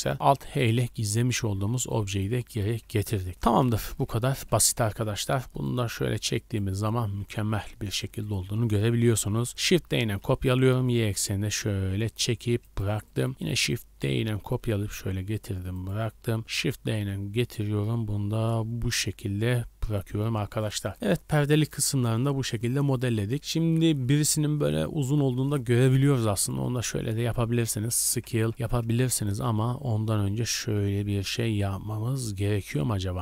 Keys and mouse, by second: 0.1 alt+h, 0.3-2.3 drag, 1.5 a, 1.6 a, 3.9 KP_1, 4.3 KP_3, 4.8 z, 5.6-6.9 drag, 7.0 drag, 7.2-7.7 drag, 7.3 z, 9.5 shift+d, 13.3 shift+d, 16.4 shift+d, 20.3 click, 21.0-22.1 middle drag, 22.1-22.8 drag, 23.3-26.8 middle drag, 27.0 shift+middle drag, 28.0 s.